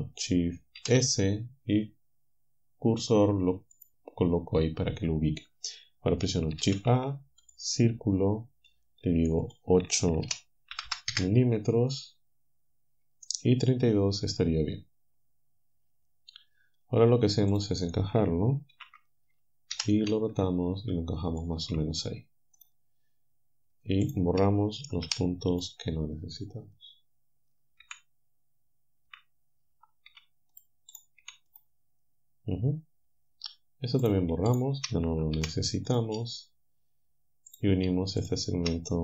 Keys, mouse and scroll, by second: 0.8 shift+s, 3.8-6.7 drag, 6.7 shift+a, 7.5 click, 9.5 click, 10.3 8, 10.7 m, 10.9 m, 11.1 Return, 18.8 ctrl+l, 19.7 r, 21.3 ctrl+click, 22.6 click, 24.1 shift+click, 25.1 Delete, 25.6 click, 27.9 l, 29.1 l, 30.1 Delete, 30.6 click, 31.2 Delete, 34.1 click, 34.5 shift+click, 35.4 Delete, 35.9 click, 37.5 click.